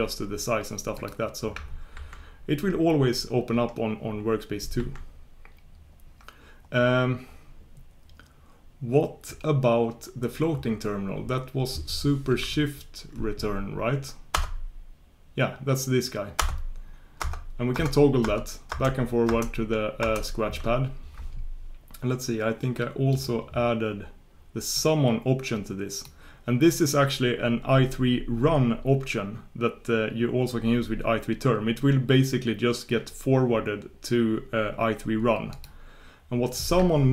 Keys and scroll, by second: 4.8 super+1.